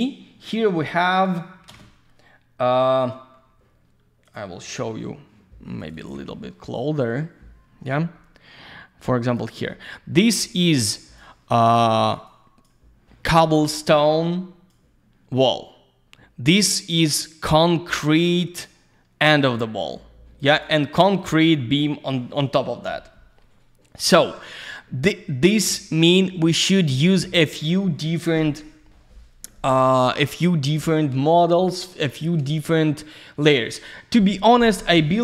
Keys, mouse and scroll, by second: 1.0 click, 1.7 ctrl+space, 4.2 click, 5.8 click, 9.0 click, 10.4-10.9 scroll down 1, 10.9 click, 12.3 click, 14.2 click, 20.4 click, 21.6 ctrl+scroll down 1, 23.5-24.0 ctrl+scroll down 1, 33.6 click, 35.0 click.